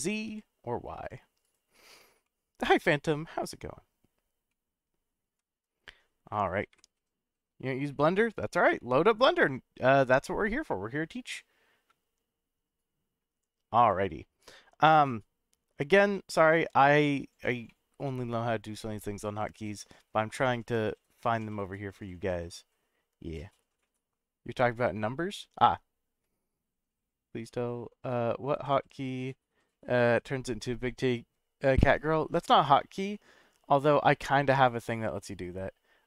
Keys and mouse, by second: 0.2 y, 1.4 right click, 2.2-3.7 middle drag, 4.5-4.9 middle drag, 5.3 /, 6.7 KP_Decimal, 8.1-8.9 middle drag, 9.9-13.2 middle drag, 14.1 KP_Subtract, 16.0 KP_0, 17.7-18.8 middle drag, 19.5-20.1 middle drag, 21.3-26.1 drag.